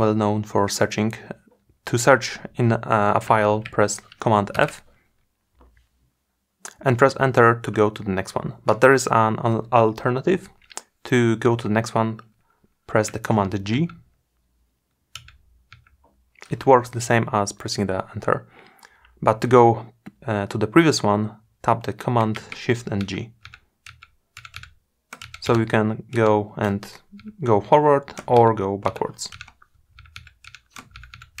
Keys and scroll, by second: 4.1 super+Return, 12.9 super+g, 22.0 shift+super+g.